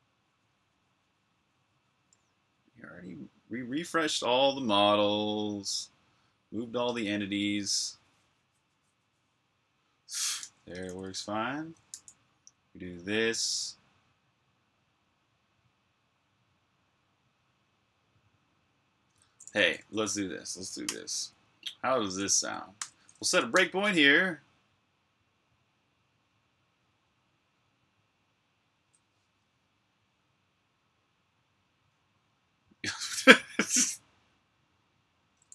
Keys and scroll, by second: 10.5 super+q, 11.7 u, 19.1-22.6 typing, 22.0 super+h, 23.3 super+\, 24.3-25.1 typing, 27.7 super+o, 28.0 typing, 30.0 Return.